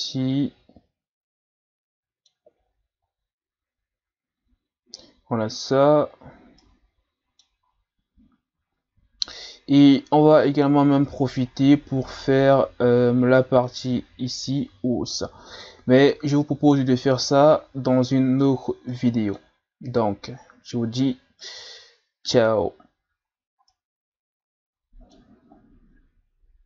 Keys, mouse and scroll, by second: 6.1-6.6 scroll down 2, 6.6-7.9 middle drag, 7.9-8.8 scroll up 3, 8.8-9.9 scroll up 1, 9.9-13.0 middle drag, 15.9-16.7 scroll down 2, 18.9-23.3 middle drag, 23.3 scroll down 2, 23.7-26.6 middle drag.